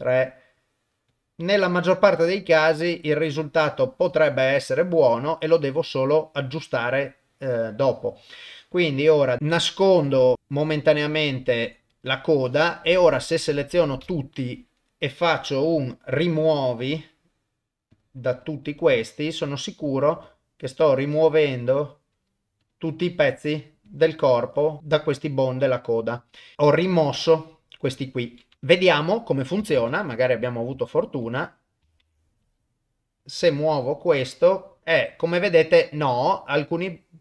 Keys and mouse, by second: 0.6 click, 1.1 click, 2.2 click, 2.7 click, 3.3 click, 7.3 click, 9.4 click, 11.1 click, 12.3 click, 14.0 a, 15.2 middle click, 16.7 middle click, 17.9 click, 19.0 click, 19.7 click, 20.2 click, 21.2 click, 22.2 click, 23.1 click, 23.9 click, 24.5 click, 25.1 click, 26.5 click, 28.5 shift+middle click, 29.7 ctrl+Tab, 30.8 shift+middle click, 31.4 click, 32.0 ctrl+Tab, 32.4 click, 33.5 r.